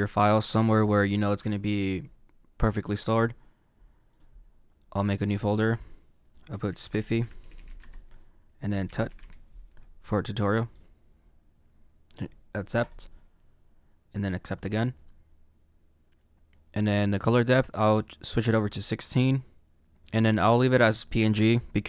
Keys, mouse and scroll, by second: 19.0 click.